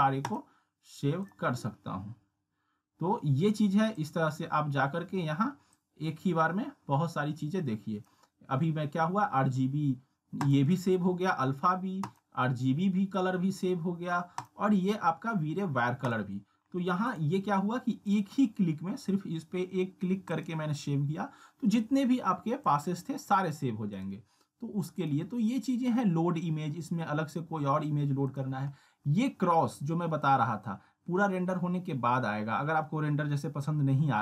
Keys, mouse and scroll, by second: 4.0-8.3 drag, 20.4 click, 22.7-23.6 drag, 28.3 click.